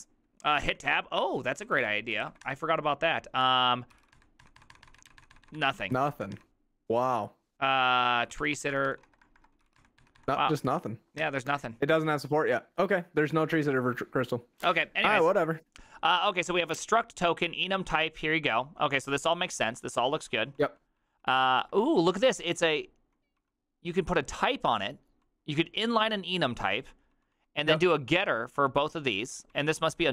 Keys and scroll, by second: 0.7-4.4 typing, 4.4 Tab, 4.6 Tab, 4.7 Tab, 4.9 Tab, 5.0 Tab, 5.1 Tab, 5.2 Tab, 5.5 Tab, 5.6 Tab, 5.7 Tab, 6.1 Tab, 6.1 BackSpace, 6.4 Tab, 7.8-10.6 typing, 8.9 Tab, 10.2 Tab, 11.2 Tab, 12.5 Down, 13.5 ctrl+c, 13.6 ctrl+c, 13.8 ctrl+c, 15.0 typing, 16.3-25.1 typing, 26.2-27.8 typing, 29.2-30.1 typing.